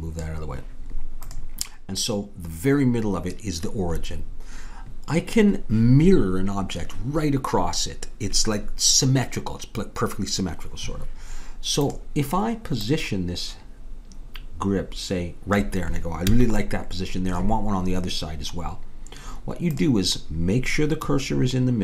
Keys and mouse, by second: 11.9-14.8 drag, 16.3 a, 19.8-21.8 drag.